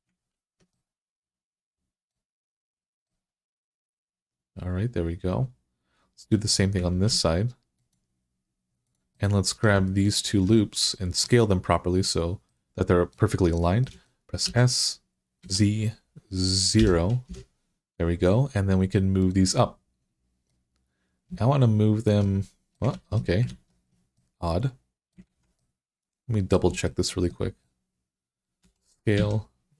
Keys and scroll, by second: 6.7 ctrl+r, 14.3 s, 15.2 z, 16.6 9, 17.1 Return, 22.8 ctrl+z, 23.3 ctrl+z, 25.1 alt+z, 28.5-29.7 typing.